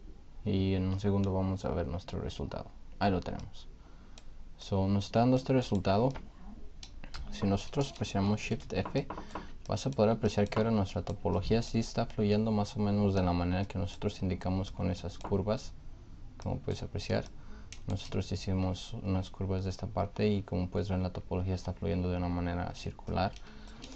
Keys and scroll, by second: 8.4 shift+f.